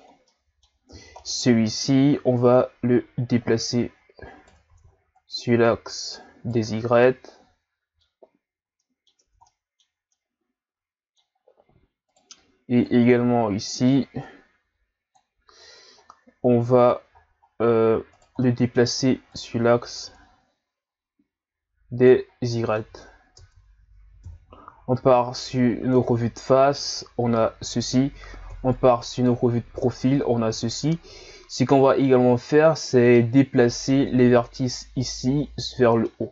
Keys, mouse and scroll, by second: 0.1 scroll down 1, 0.3 middle click, 0.8 scroll up 2, 1.2-2.4 middle drag, 2.4 right click, 4.7 ctrl+z, 5.2 right click, 6.7 Tab, 7.0-9.2 middle drag, 9.2 Tab, 9.4-11.4 middle drag, 11.4-12.1 scroll up 1, 12.1 right click, 12.8 click, 16.0-16.5 scroll down 2, 16.8 right click, 17.2 scroll down 1, 17.4-18.1 scroll up 1, 18.1 right click, 18.4 middle click, 19.3 click, 22.3 scroll down 1, 22.5 middle click, 23.3 Tab, 24.2 KP_1, 25.4-26.1 scroll up 2, 26.1-27.3 scroll down 2, 28.5 KP_3, 29.6-31.2 shift+scroll up 3, 31.3 scroll up 3, 31.9-32.5 ctrl+scroll up 2, 32.9-34.5 middle drag, 34.5 right click, 35.6 Tab, 36.1-36.3 middle drag.